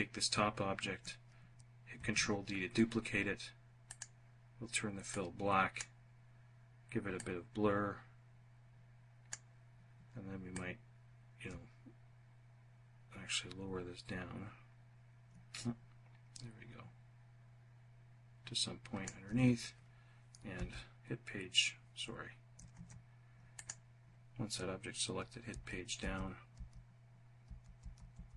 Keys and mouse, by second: 1.3 ctrl+d, 3.3 click, 4.5 click, 6.6-8.8 drag, 9.8-18.5 ctrl+drag, 19.8 Page_Down, 22.1 ctrl+z, 22.8 click, 24.8 Page_Down, 25.3 Page_Down, 25.8 Page_Down, 26.7 Page_Down, 27.8 Page_Down, 28.2 Page_Down.